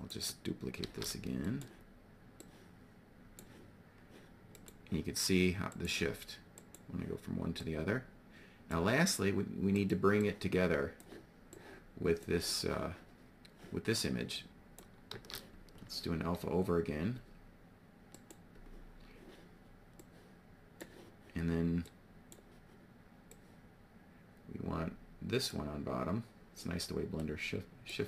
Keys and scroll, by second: 0.8 shift+d, 14.6 shift+d.